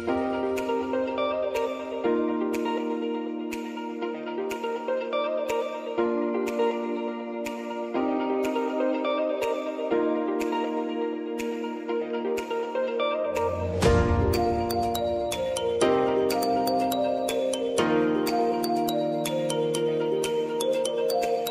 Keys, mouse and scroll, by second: 1.5-4.8 drag, 6.1 space, 8.5 right click, 10.9 click, 12.2 space, 15.5 click, 16.5 space, 18.8-21.5 drag.